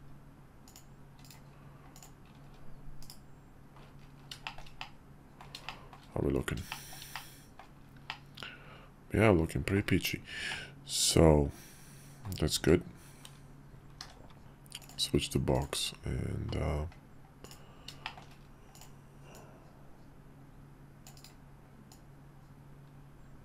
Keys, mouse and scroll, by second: 0.7 click, 1.2 right click, 1.9 drag, 3.2 /, 4.4 shift+middle click, 4.8-5.4 middle drag, 5.7 shift+middle drag, 6.7 shift+middle click, 7.1-7.6 middle drag, 8.1-9.8 middle drag, 10.5-12.2 middle drag, 14.0 d, 15.5 click, 17.5 click, 18.0 shift+middle click, 19.3-21.4 drag, 21.9-23.4 drag.